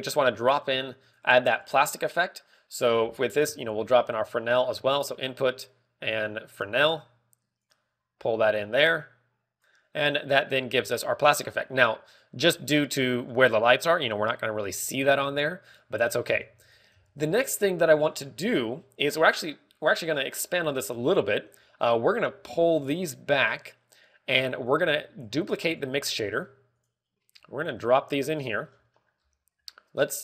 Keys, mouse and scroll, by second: 0.6 click, 1.5 click, 2.5 scroll down 4, 2.7 middle click, 3.0-4.0 scroll up 4, 3.4 middle click, 4.4 shift+a, 7.7 g, 8.6 click, 9.2 click, 10.6 g, 10.9 middle click, 10.9 g, 12.4-13.7 scroll up 12, 14.2 g, 16.0-16.4 scroll down 5, 16.4 middle click, 17.0 a, 17.2 b, 17.8 g, 19.0 click, 23.3 g, 25.5 click, 25.8 middle click, 26.3 click, 26.6 shift+d, 27.8 middle click, 27.8 click, 27.8 shift+d, 28.5 click, 29.6-30.0 scroll down 4, 29.9 middle click, 30.1 scroll up 3.